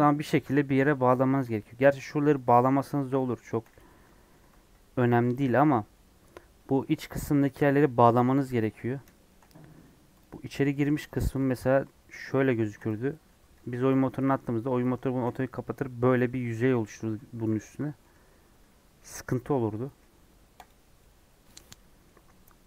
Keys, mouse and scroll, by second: 1.8 click, 2.0 2, 2.3 click, 3.4 shift+click, 4.2 ctrl+x, 4.8 scroll up 1, 5.2 ctrl+z, 6.0-6.5 scroll down 1, 6.5 middle click, 7.2 scroll up 1, 7.4 middle click, 8.3 scroll down 1, 8.5 middle click, 8.7-9.0 scroll up 3, 9.0 shift+middle click, 9.7 3, 10.1 click, 10.6 2, 11.1 click, 13.4 scroll down 2, 15.2 f, 15.5-17.1 middle drag, 17.1 scroll up 1, 17.7 middle click, 18.0 3, 20.6 x, 20.9-22.0 middle drag, 22.0 scroll down 3, 22.3 scroll up 2, 22.6 middle click.